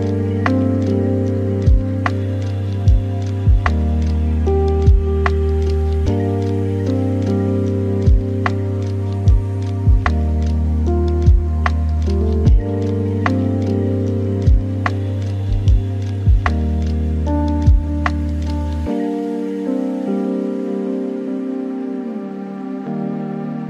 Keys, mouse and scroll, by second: 1.1 shift+a, 4.0 g, 11.7 g, 13.6 g, 15.5-16.9 middle drag, 16.9 g, 18.9 r, 21.1-22.3 middle drag, 22.3 r.